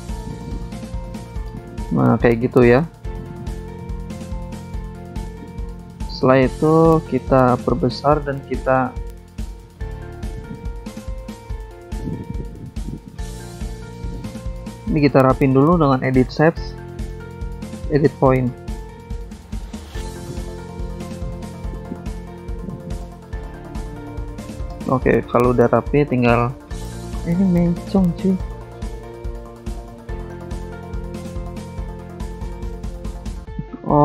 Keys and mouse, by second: 0.2 shift+click, 2.3 click, 2.9 click, 3.8 click, 4.6 click, 6.3 click, 7.4 click, 7.9 click, 8.7 ctrl+z, 9.3 click, 10.8 ctrl+click, 11.6 click, 12.5 click, 12.7 click, 13.1 shift+click, 14.2 click, 15.6 click, 17.1 click, 17.2 click, 18.5 click, 19.9 click, 20.9 click, 21.5 click, 23.0 click, 24.6 click, 26.9 click, 27.7 click, 29.4 click, 30.0 click, 31.2 click, 32.5 click, 33.6 click.